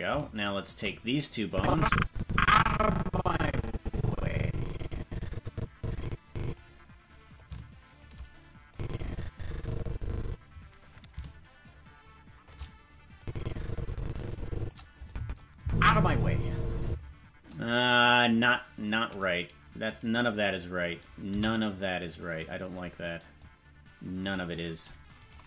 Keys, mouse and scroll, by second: 0.4 shift+right click, 1.5-6.5 drag, 7.3 click, 8.7-10.3 drag, 10.8-12.5 drag, 13.2-14.7 drag, 15.0 click, 15.5 space, 16.8 space, 19.8 right click, 21.2 c.